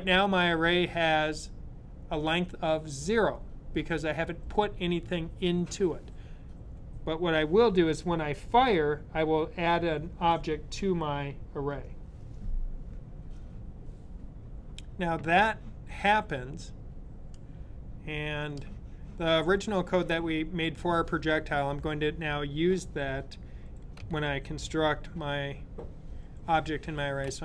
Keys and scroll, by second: 26.7 super+x.